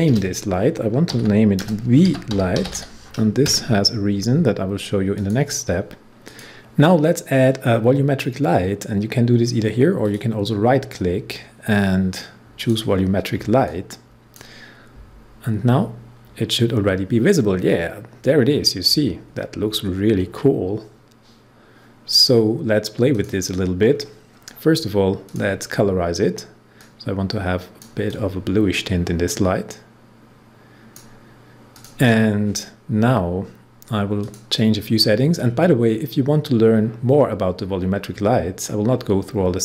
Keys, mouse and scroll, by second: 0.0 Return, 1.1-3.2 typing, 5.1 click, 10.0 right click, 12.5-16.9 drag, 19.2-20.5 scroll up 1, 20.5-22.4 scroll down 1, 23.1 click, 23.8 scroll down 1, 25.2 click, 25.5-31.7 drag, 34.2 click, 38.7 scroll down 1.